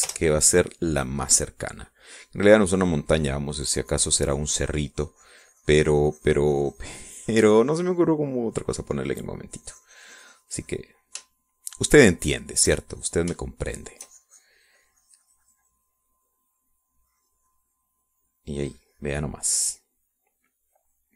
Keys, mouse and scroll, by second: 0.0-0.9 typing, 1.3 Return, 2.2 click, 4.6-12.4 drag, 12.9-14.1 shift+drag, 14.3 shift+click, 15.0-21.1 shift+drag.